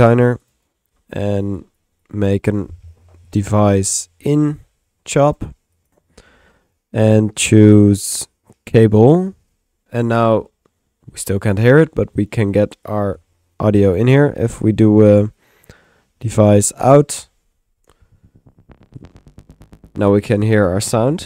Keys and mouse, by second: 0.0-1.0 typing, 1.6 click, 2.0 click, 2.6 Tab, 5.1-5.9 typing, 5.4 click, 5.8 click, 6.1 middle click, 7.4 click, 9.0 click, 12.9 click, 13.9 click, 14.8-16.1 drag, 15.5 Tab, 15.8 typing, 16.5 click.